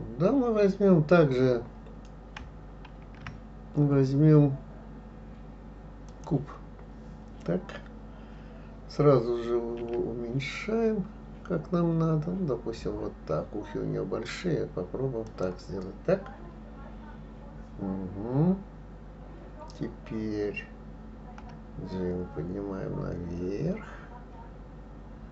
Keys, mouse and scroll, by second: 3.0 shift+a, 9.8 s, 21.4 g.